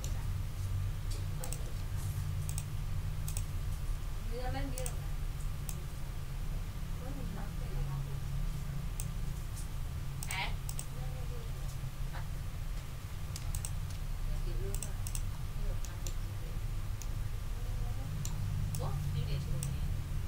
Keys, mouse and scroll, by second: 1.4 click, 2.4 shift+click, 3.2 shift+click, 4.7 click, 5.6-9.1 drag, 10.2 click, 10.6 click, 11.4 d, 13.5 shift+click, 14.7 middle click, 15.1 ctrl+middle click, 15.3 ctrl+scroll down 2, 15.8 ctrl+middle click, 16.6 ctrl+scroll down 2, 17.0 ctrl+middle click, 18.7-19.8 ctrl+drag.